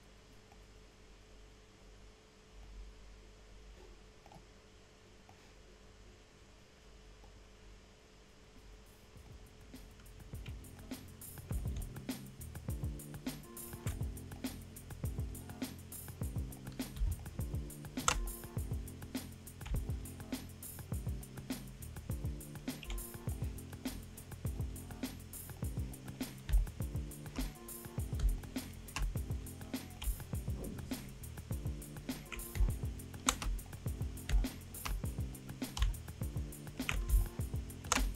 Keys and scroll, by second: 17.0 space, 26.5 space, 27.0 space, 29.0 ctrl+alt+space, 32.5 space, 34.3 space, 34.8 space, 37.1 space.